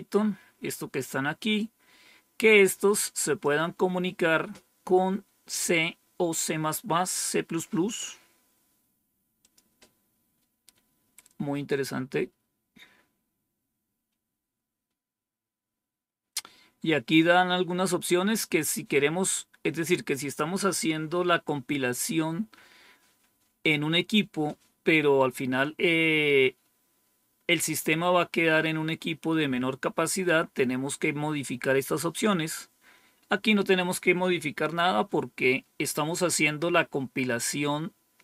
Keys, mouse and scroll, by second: 1.4-3.3 drag, 9.3 click, 13.5 scroll down 1, 34.8-35.5 scroll down 1.